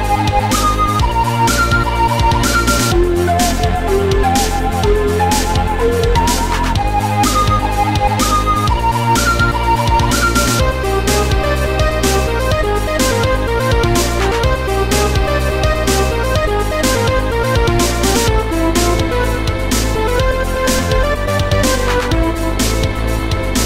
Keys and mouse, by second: 0.5 shift+click, 1.6 click, 2.6 shift+click, 3.4 click, 4.9 click, 6.8 click, 7.7 click, 10.0 click, 11.9 shift+click, 12.8 click, 13.7 click, 15.0 click, 15.3 click, 16.7 Delete, 20.6 click, 22.8 click.